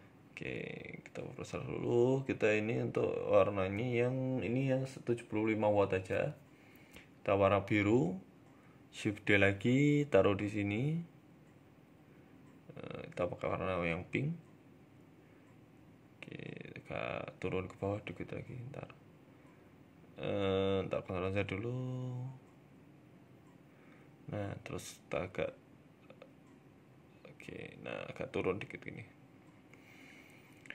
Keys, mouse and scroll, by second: 0.6 KP_0, 1.1-1.6 scroll down 2, 2.6 click, 5.1 click, 7.3-8.0 scroll down 1, 8.0 scroll down 3, 8.0 KP_7, 8.7 shift+d, 9.4 r, 10.7 g, 12.0 click, 13.9 KP_0, 14.6 scroll up 2, 15.1-16.0 scroll up 1, 15.1 KP_3, 17.5 middle click, 18.8 ctrl+z, 19.0 ctrl+z, 19.5 ctrl+z, 20.1 KP_3, 20.7 KP_7, 21.5 r, 23.8 KP_1, 24.6 e, 25.3 r, 26.3 g, 27.6 KP_7, 28.3 r, 28.9 g, 30.2 click.